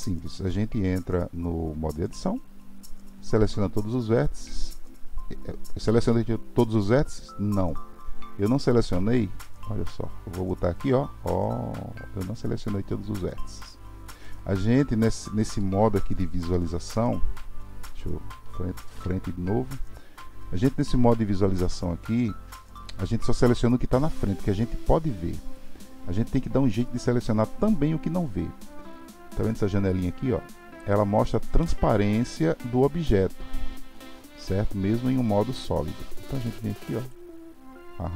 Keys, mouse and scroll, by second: 1.6 Tab, 3.4-6.4 drag, 9.4-12.4 middle drag, 18.9 KP_1, 37.0-38.1 drag.